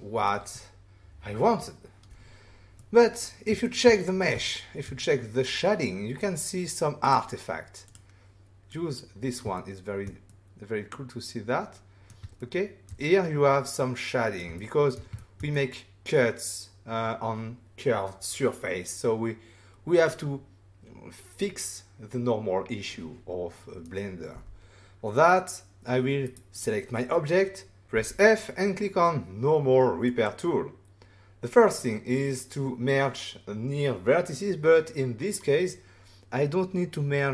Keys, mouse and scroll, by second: 2.7 middle click, 3.6 shift+middle click, 3.9 middle click, 4.4 ctrl+middle click, 5.0 middle click, 7.0 click, 7.8 click, 8.7 click, 9.5 shift+middle click, 10.2 middle click, 12.3 ctrl+middle click, 13.0 middle click, 14.5 ctrl+middle click, 15.3 shift+middle click, 15.5 middle click, 24.3 f, 26.2 right click, 26.5 click, 26.6 double click, 27.9 f, 30.0 click.